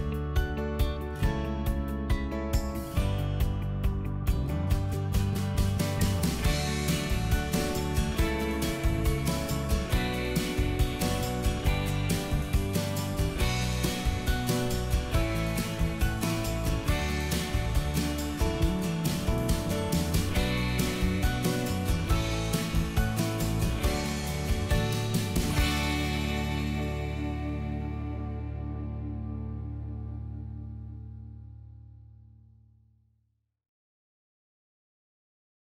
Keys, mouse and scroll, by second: 0.7 ctrl+click, 2.2 middle click, 3.2 ctrl+click, 5.6 ctrl+click, 6.0 middle click, 7.8 click, 8.5 middle click, 9.7 m, 10.4 ctrl+click, 11.9 right click, 14.9 click, 17.5 middle click, 21.7 click, 23.7-26.8 middle drag, 26.8 space, 27.3 click, 27.5 g, 28.0-30.7 middle drag.